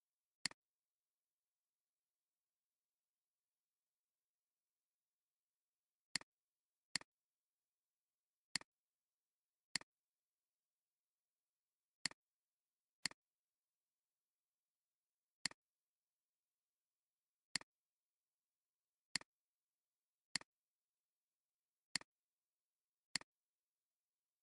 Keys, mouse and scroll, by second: 0.0 alt+scroll down 1, 0.3 space, 5.6 alt+scroll up 1, 8.9 alt+scroll down 1, 11.1 ctrl+2, 15.4 alt+shift+click, 18.7 alt+scroll down 1, 19.0 space, 19.2 alt+scroll down 1, 19.5 space, 19.9 alt+scroll up 1, 21.1 alt+scroll up 1, 21.8 space, 22.4 space, 22.6 alt+scroll, 22.7 alt+scroll down 1, 23.0 space.